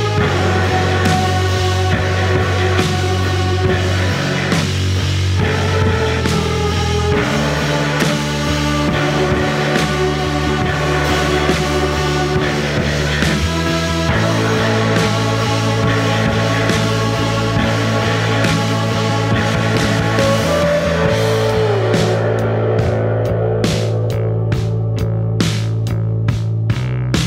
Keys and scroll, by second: 1.5 F1, 3.1 4, 6.1 1, 6.9 ctrl+d, 11.5 F1, 17.4 F1.